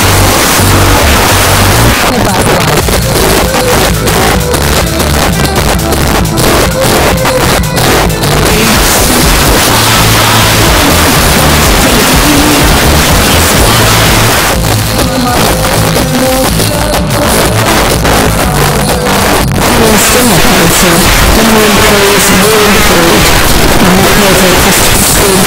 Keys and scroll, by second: 1.9 Page_Down, 14.3 Page_Down.